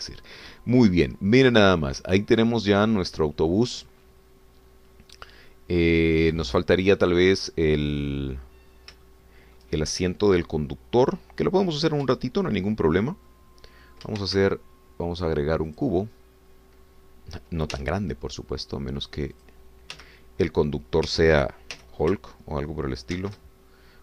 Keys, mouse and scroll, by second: 1.8 scroll down 1, 2.2-9.6 drag, 9.6 scroll down 2, 10.0 shift+middle click, 14.3 middle click, 15.2 shift+a, 16.7 click, 17.5 scroll down 2, 18.8 s, 20.3 click, 20.9 g, 22.1 Escape, 22.7 g.